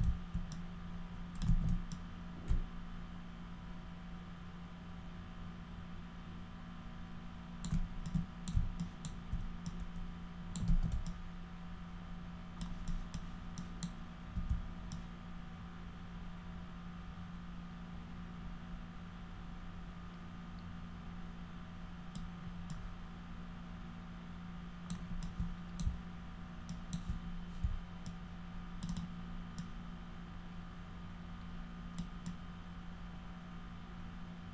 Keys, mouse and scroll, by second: 0.5 click, 1.5 ctrl+z, 1.9-7.7 alt+drag, 8.1 alt+click, 8.8 alt+click, 9.7 click, 10.7 ctrl+z, 11.1-12.6 alt+drag, 12.9 alt+click, 13.6 alt+click, 14.9-22.2 alt+drag, 22.7-24.9 alt+drag, 25.3 alt+click, 26.7 alt+click, 28.1 alt+click, 28.9 alt+click, 29.6-32.0 alt+drag, 32.3-34.5 alt+drag.